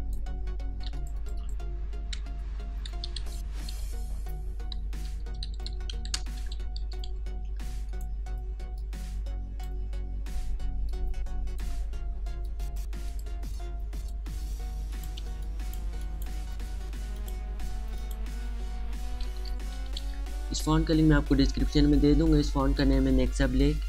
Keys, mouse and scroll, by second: 0.8 t, 0.9 click, 3.0-3.7 typing, 5.4-7.1 typing, 7.8-10.9 drag, 10.9-14.9 alt+shift+drag, 15.3 space, 15.4 click, 15.4 click, 19.2-20.0 typing.